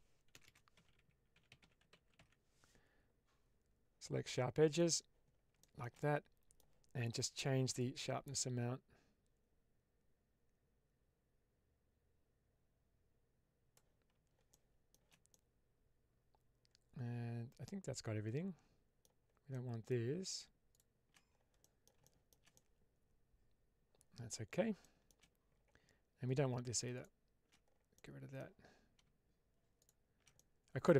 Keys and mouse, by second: 0.3 BackSpace, 5.5 shift+middle click, 5.9 middle click, 7.7-13.7 drag, 14.4 shift+middle click, 15.2-18.9 middle drag, 19.4 middle click, 20.6 shift+click, 21.5 middle click, 21.9 shift+middle click, 22.4-24.2 middle drag, 24.7 shift+middle click, 26.9 alt+shift+click, 27.8 middle click, 29.7 alt+shift+click, 30.2-30.9 middle drag.